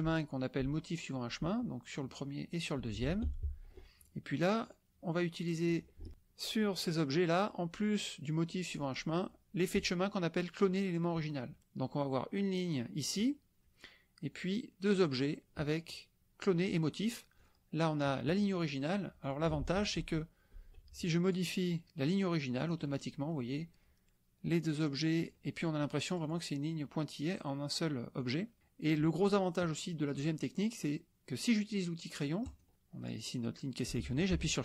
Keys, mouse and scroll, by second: 2.5 click, 3.5 ctrl+z, 4.0 ctrl+drag, 4.7 click, 5.4-5.9 drag, 12.1-13.2 drag, 14.4-15.1 drag, 17.4 click, 19.2 click, 19.6 ctrl+z, 21.2 ctrl+click, 22.1 click, 22.8 middle click, 24.6 click, 26.0 click, 26.8 click, 28.2 click, 28.6 middle click, 29.1-32.4 scroll up 1, 32.4 click.